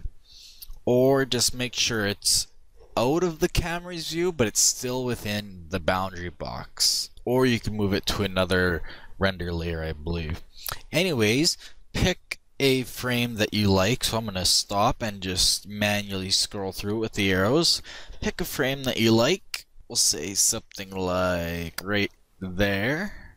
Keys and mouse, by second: 12.9-14.6 drag, 14.2-19.5 Left, 19.8 Left, 20.5 Left, 20.5 Right, 20.7 Right, 22.3 click.